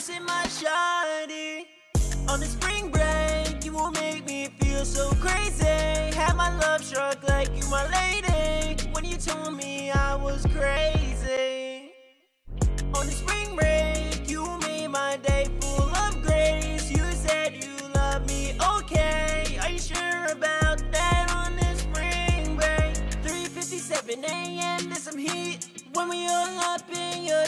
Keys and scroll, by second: 2.5 BackSpace, 3.5-4.7 typing.